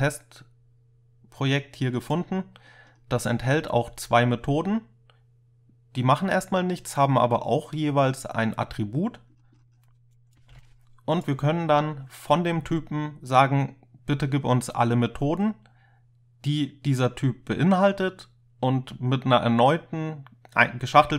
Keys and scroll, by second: 10.5 ctrl+k, 10.6 ctrl+u.